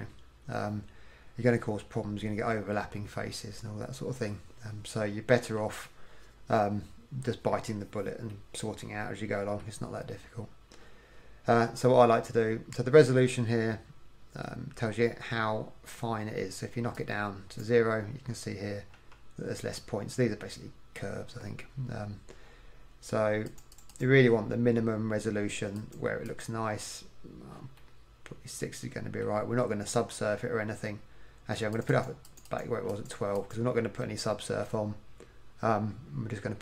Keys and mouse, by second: 5.4 KP_1, 17.0-18.9 drag, 19.0 KP_1, 23.6-29.3 drag, 30.0-31.8 middle drag, 31.8-34.1 drag, 34.1-35.4 middle drag.